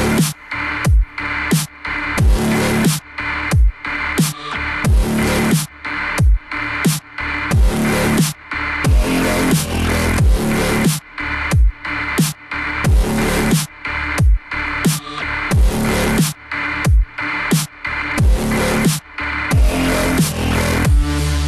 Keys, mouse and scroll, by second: 2.0-4.5 alt+drag, 4.5 g, 7.1-8.5 scroll down 7, 8.5 KP_1, 13.8 KP_7, 16.1 KP_1, 17.5-20.6 middle drag.